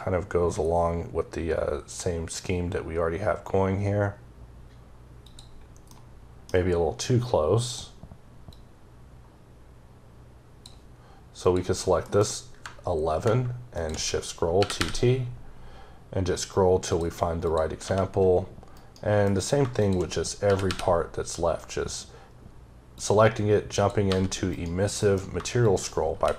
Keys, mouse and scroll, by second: 0.3-0.9 scroll down 1, 1.4-2.2 scroll up 3, 2.7-3.6 scroll up 2, 3.6-4.4 scroll up 1, 4.4-5.1 scroll up 1, 5.1 click, 5.8 middle click, 7.5 click, 8.4 click, 11.3 click, 13.6 shift+click, 14.4 t, 14.9-15.6 scroll up 3, 16.1-16.7 scroll up 3, 16.7 click, 17.3 click, 17.7 g, 18.6 right click, 19.1 m, 19.6 shift+click, 20.3 t, 20.8-22.8 scroll up 5, 22.8 click, 23.6 click, 23.9 g, 24.4 right click, 24.8 m, 25.5 shift+click, 26.0 typing.